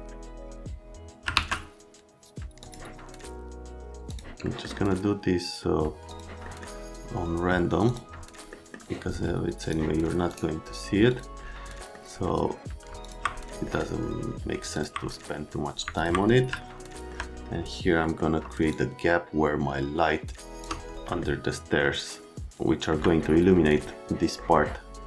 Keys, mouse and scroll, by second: 1.3 alt+1, 2.6 click, 4.1 click, 4.4 right click, 6.1 click, 6.4 middle click, 7.8 click, 8.5 middle click, 9.6 middle click, 11.1 middle click, 11.8 middle click, 13.0 click, 13.7 right click, 14.7 click, 16.0 click, 16.6 alt+middle click, 18.0 middle click, 18.7 shift+click, 21.2 alt+middle click, 24.4 middle click, 24.5 right click.